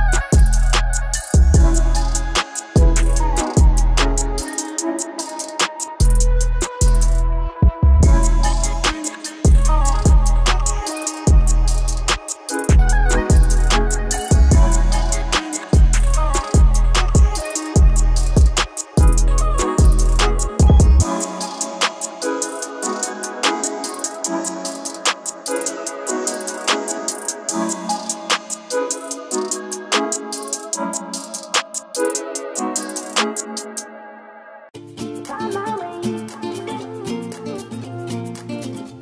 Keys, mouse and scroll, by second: 5.3 scroll down 1, 6.2 middle click, 7.1 click, 16.3 ctrl+Num_Lock, 16.4 ctrl+click, 18.9-20.3 typing, 20.6 Return, 22.0-26.9 drag, 22.0 typing, 26.9-37.5 drag.